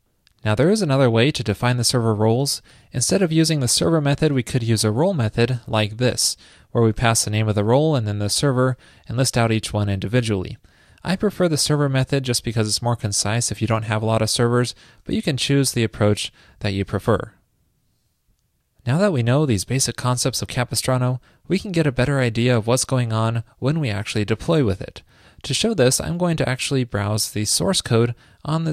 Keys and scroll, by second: 2.8 shift+super+Left, 4.3 super+v, 11.8 super+z, 15.3 shift+super+z, 17.0 super+z.